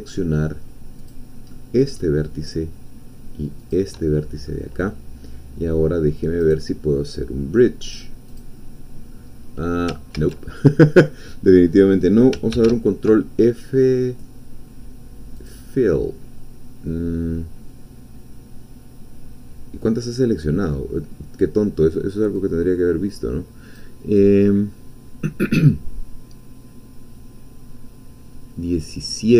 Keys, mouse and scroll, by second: 1.0 shift+click, 1.5 shift+middle click, 2.0 shift+middle click, 3.7 shift+click, 4.1-4.4 shift+scroll down 1, 5.0-6.4 middle drag, 6.4 right click, 8.3 click, 9.3-9.9 scroll down 1, 10.1 ctrl+z, 12.5 ctrl+f, 15.3 click, 22.3-23.9 drag.